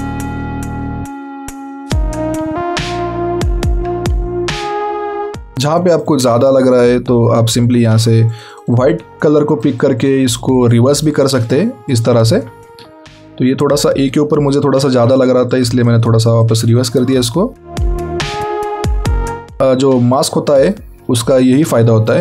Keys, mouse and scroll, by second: 0.3 alt+scroll down 1, 0.6 alt+scroll up 2, 0.8 alt+scroll down 2, 1.2 alt+scroll up 2, 2.5 alt+scroll down 1, 2.5-3.1 alt+scroll up 2, 4.8 x, 5.1 scroll up 1, 5.3 click, 12.6 scroll down 1, 13.8 alt+scroll down 1, 14.1 alt+scroll up 1, 15.0 scroll up 1, 15.4 click, 17.4 alt+scroll down 1, 17.5 alt+scroll up 1, 17.6 alt+scroll down 1, 17.9-18.3 alt+scroll up 2, 18.3 click.